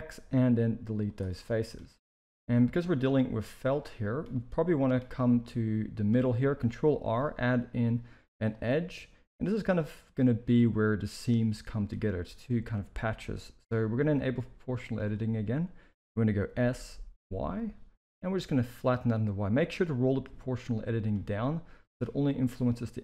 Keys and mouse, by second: 1.4 middle drag, 2.2 z, 2.8-3.9 middle drag, 4.3-4.8 middle drag, 5.4 middle click, 7.0 ctrl+r, 11.5 middle click, 14.8 click, 16.3 s, 21.4-21.9 middle drag, 22.2-23.0 middle drag.